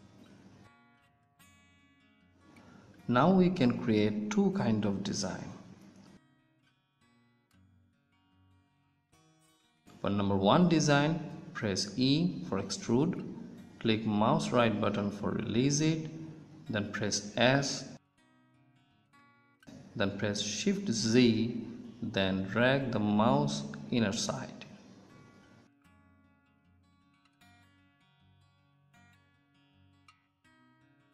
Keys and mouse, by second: 0.5-1.9 middle drag, 6.2 middle click, 11.7 e, 14.1 o, 14.1 s.